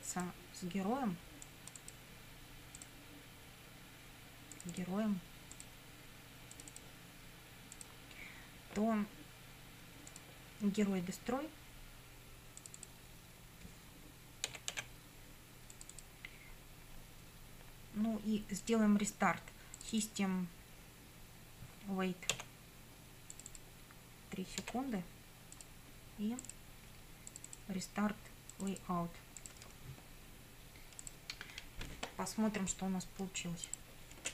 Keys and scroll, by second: 14.3-15.3 typing, 22.4 w, 24.7 3.